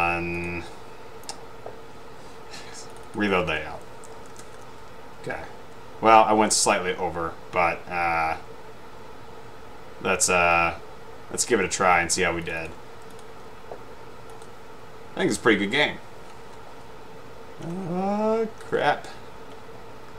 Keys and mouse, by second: 3.0 click, 4.3-5.2 typing, 12.6 click, 12.7 click, 13.2 click, 17.4 Up, 17.4 Left, 17.8 Right, 18.7 Left.